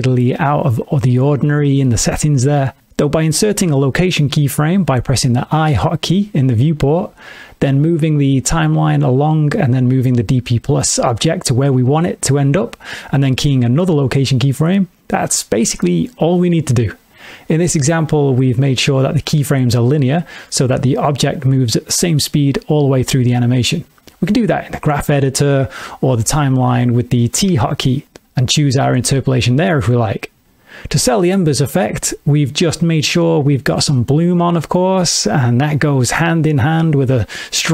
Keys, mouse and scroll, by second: 3.8 i, 7.7 click, 9.3 middle click, 10.6 g, 12.0 click, 13.6 i, 18.8 click, 21.9 click, 27.4 t, 32.7 click, 34.3 middle click, 37.4 click.